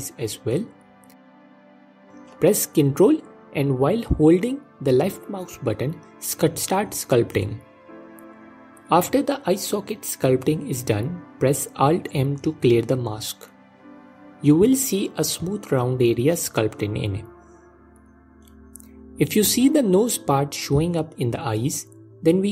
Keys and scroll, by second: 10.8 alt+m, 19.6 g, 21.4 alt+q.